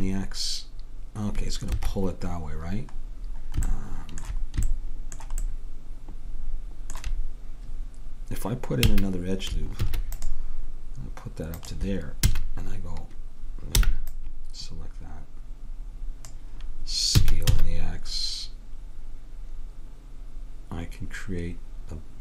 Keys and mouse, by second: 9.0 a, 9.9 ctrl+r, 12.3 a, 13.9 b, 17.4 s.